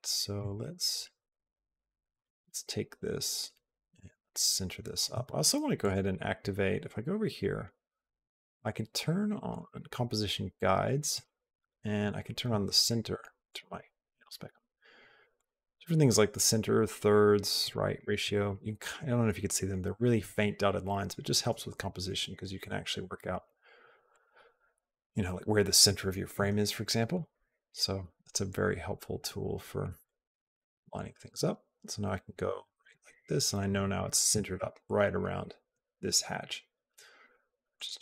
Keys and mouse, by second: 0.3-1.9 shift+drag, 2.4-4.8 shift+drag, 5.6 click, 9.3 click, 10.9 click, 13.3 click, 15.1 click, 17.4 click, 17.7 click, 23.9 click, 26.9 click, 30.0-33.7 drag, 37.5 click.